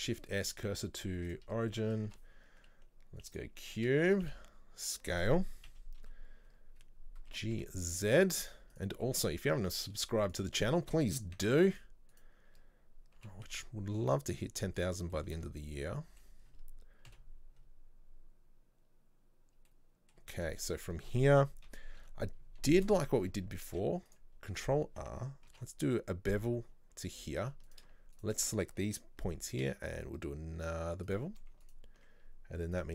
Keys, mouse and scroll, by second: 1.4 shift+s, 1.8-3.4 middle drag, 3.4 shift+a, 3.7-4.1 middle drag, 4.1 Tab, 4.3 s, 5.8 KP_3, 6.5 scroll up 1, 7.4 g, 9.1-10.3 shift+middle drag, 10.3 click, 11.9 z, 12.2 right click, 13.3 g, 15.2-17.2 shift+middle drag, 17.2 KP_7, 17.6 scroll up 1, 19.7 scroll up 5, 19.7-20.7 middle drag, 20.7-21.1 scroll down 2, 21.7 KP_3, 22.1 KP_1, 22.7-23.7 shift+middle drag, 23.7 ctrl+r, 27.7 alt+right click, 28.2 alt+shift+right click, 29.6 ctrl+b, 31.7 alt+right click, 32.8 click.